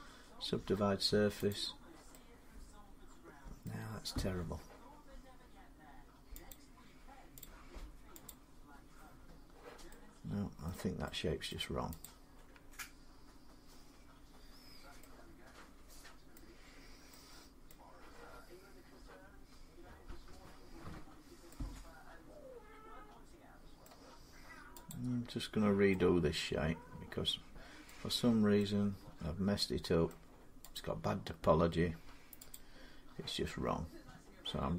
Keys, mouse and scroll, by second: 1.3 click, 3.4 middle click, 6.3 click, 7.2 click, 8.1 click, 10.5 middle click, 11.3 middle click, 11.8 click, 12.3 Tab, 14.4 scroll down 2, 14.5 scroll up 2, 15.4 scroll, 16.1 middle click, 16.5 scroll down 2, 17.5 middle click, 18.1-18.9 scroll up 1, 23.6 middle click, 24.7 click, 27.6 middle click, 28.1 scroll, 29.0 scroll up 4, 29.9 middle click, 30.6 click, 32.3 click, 32.5 scroll.